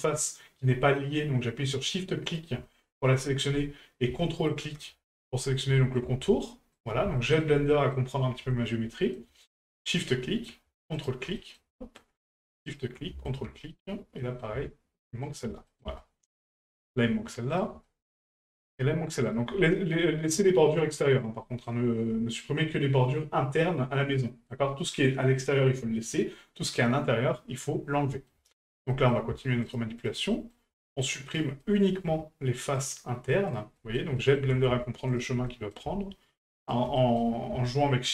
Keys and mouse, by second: 2.3 shift+right click, 3.1-3.6 middle drag, 4.5 ctrl+right click, 5.1 ctrl+right click, 5.4 middle drag, 5.8 shift+middle drag, 6.7 ctrl+right click, 7.2 shift+middle drag, 7.7 middle drag, 8.5 shift+middle drag, 8.9 middle drag, 9.9 shift+right drag, 10.2 shift+middle drag, 10.9 ctrl+right click, 11.4 middle click, 11.7 shift+middle click, 12.7 shift+right click, 13.3 ctrl+right click, 13.6 middle click, 14.2 middle click, 15.2 shift+right click, 15.7 middle click, 16.0 shift+middle click, 16.5 shift+middle click, 17.5 shift+right click, 17.8 middle click, 19.2 shift+right click, 21.4 middle drag, 24.2 middle drag, 28.1 middle drag, 28.5 shift+middle click, 28.9 middle drag, 29.6 shift+right click, 30.0 shift+right drag, 30.3 middle drag, 31.3 shift+right drag, 31.6 middle drag, 32.8 shift+right click, 33.5 shift+right click, 33.8 middle drag, 34.2 shift+middle drag, 35.1 ctrl+right click, 35.5 middle drag, 36.6 ctrl+right click, 37.0 middle drag.